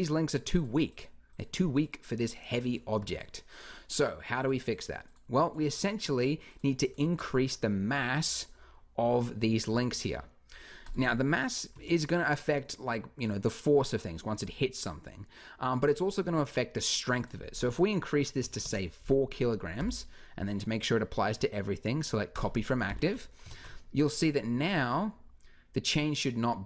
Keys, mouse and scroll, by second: 17.0-18.8 drag, 19.6 t, 22.7 t, 23.2 alt+a.